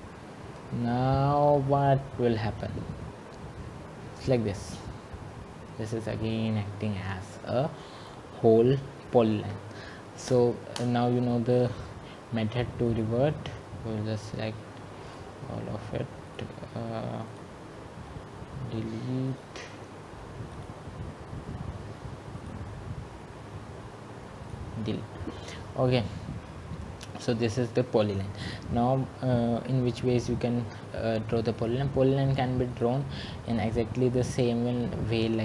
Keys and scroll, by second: 10.5 Return, 10.9 `.